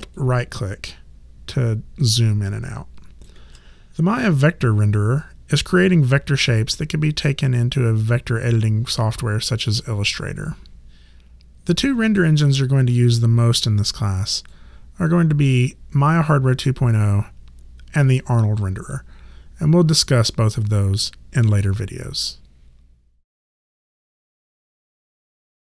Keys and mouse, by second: 0.1 alt+right click, 14.3 click.